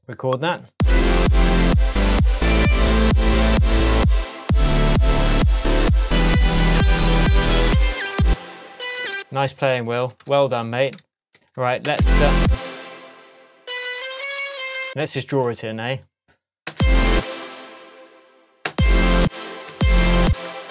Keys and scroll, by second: 8.2 space, 11.3 super+a, 11.9 super+space, 12.4 space, 13.9 Up, 16.7 space, 18.6 space.